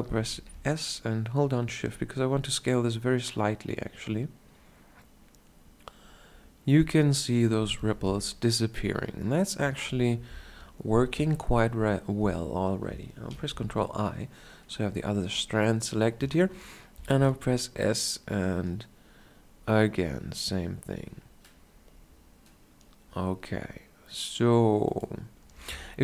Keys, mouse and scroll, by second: 0.5 s, 7.8-8.9 drag, 8.9 Tab, 12.0 Tab, 13.6 ctrl+i, 17.2 s, 17.8-18.8 shift+scroll down 1, 25.4 click.